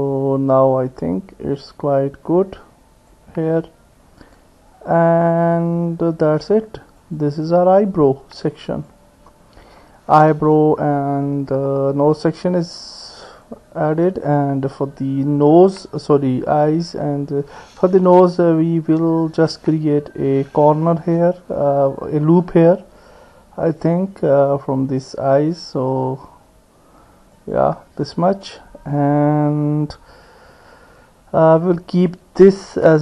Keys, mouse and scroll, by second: 0.6-3.1 drag, 4.2 click, 5.2-6.3 drag, 7.0 click, 7.7-8.9 drag, 12.7 click, 20.9 ctrl+r.